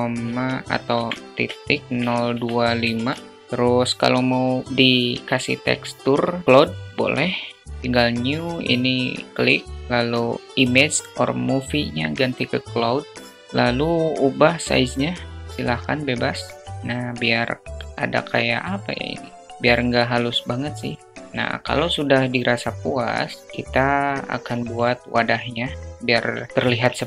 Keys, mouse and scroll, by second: 8.8 click, 9.8-11.2 drag, 13.6-17.1 drag, 18.5-19.5 alt+middle drag, 20.1 alt+middle drag, 24.4 click, 26.1 shift+a.